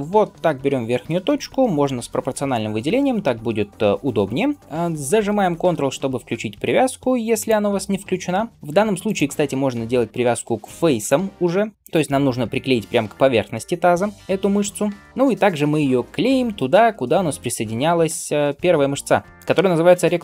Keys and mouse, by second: 0.3 g, 7.4-9.0 ctrl+middle drag, 8.5 ctrl+z, 9.0-20.2 drag, 16.0 g.